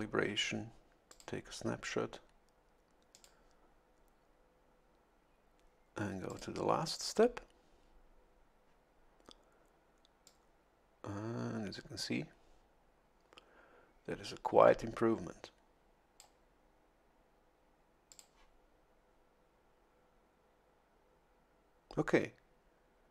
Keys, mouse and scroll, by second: 1.1 click, 3.1 click, 6.3 click, 10.2-16.5 drag, 18.1 click.